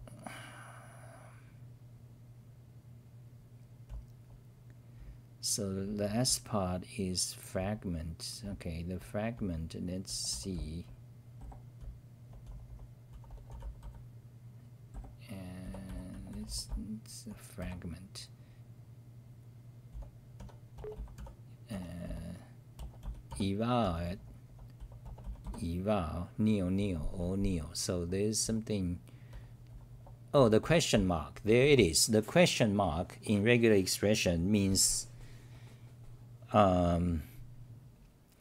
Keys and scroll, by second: 2.3 n, 8.4-13.8 typing, 14.9-17.6 typing, 19.9-25.3 typing, 27.2 Delete, 27.2-32.3 typing.